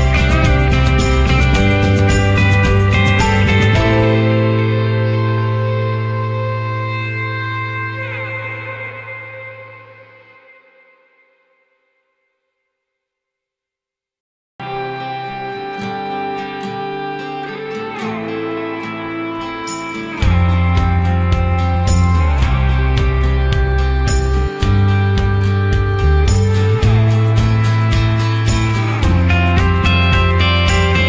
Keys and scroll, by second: 4.3 ctrl+0.